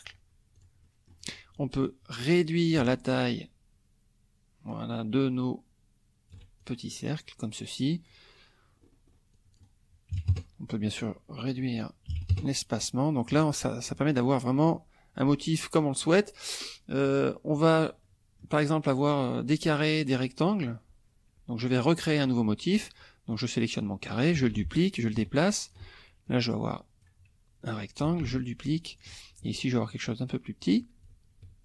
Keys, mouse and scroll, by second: 0.6 click, 1.6 click, 2.8-6.5 ctrl+shift+drag, 6.6 ctrl+shift+click, 8.8 scroll up 1, 9.3 click, 10.1 KP_1, 10.2 KP_0, 10.3 KP_Enter, 11.4 click, 12.1 KP_1, 12.3 KP_Enter, 13.2 middle click, 14.6 middle click, 17.1 click, 17.6 click, 18.0 middle click, 20.5-22.0 drag, 23.3 click, 24.5 ctrl+d, 24.7-25.9 ctrl+drag, 26.3 shift+click, 28.2 ctrl+d, 28.4 ctrl+shift+click, 29.8-30.8 shift+drag, 31.0-31.6 ctrl+shift+drag.